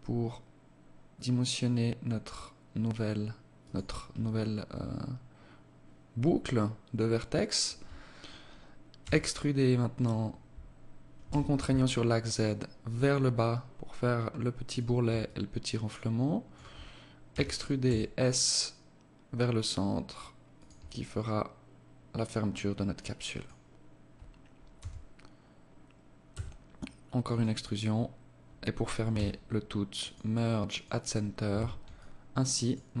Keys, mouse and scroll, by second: 3.7 alt+click, 8.4 e, 14.7 alt+click, 16.7 e, 20.5 alt+click, 24.1 e, 28.5 w, 30.9 Tab, 31.3 alt+click, 32.3 alt+click.